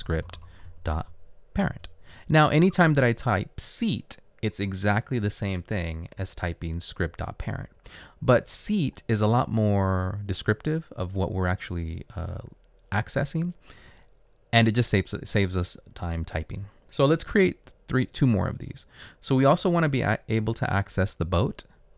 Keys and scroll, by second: 0.0-1.0 typing, 1.8 Return, 21.7 Return.